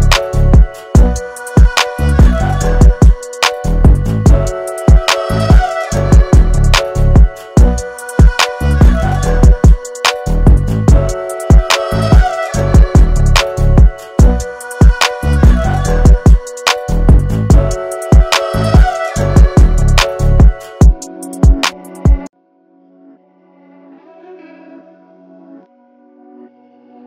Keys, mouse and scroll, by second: 5.3-14.8 drag, 16.2 alt+scroll up 1, 16.5 space, 16.6 click, 17.3 alt+scroll up 1, 17.6 space, 17.8 click, 18.1 space, 18.9-25.4 drag.